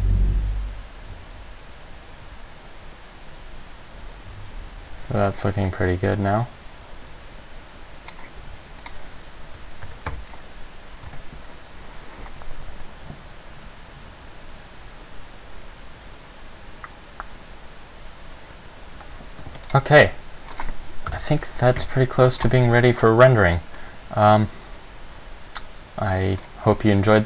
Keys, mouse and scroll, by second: 5.4 Escape, 6.0 click, 8.9 click, 11.3 alt+a, 19.1 Escape, 19.7 ctrl+s, 20.1 middle click, 20.7-21.3 scroll down 1, 21.3 KP_0.